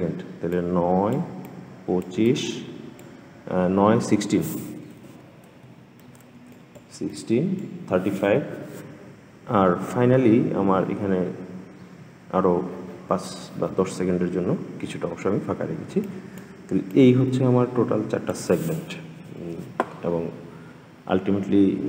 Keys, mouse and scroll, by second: 4.8 ctrl+z, 5.8 ctrl+z, 6.3-10.7 drag, 15.8-19.9 drag.